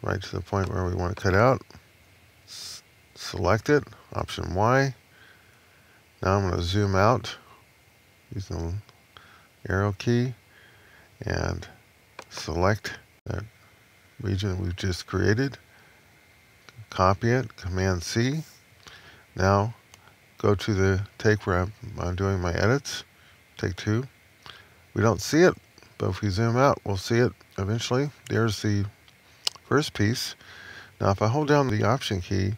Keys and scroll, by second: 4.1 alt+¥, 5.4 Left, 17.7 super+c, 26.1 Left.